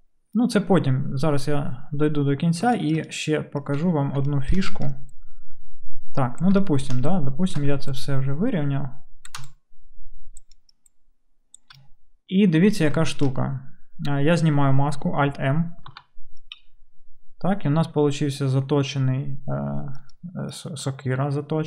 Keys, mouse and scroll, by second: 15.9 alt+m, 16.8-21.6 middle drag.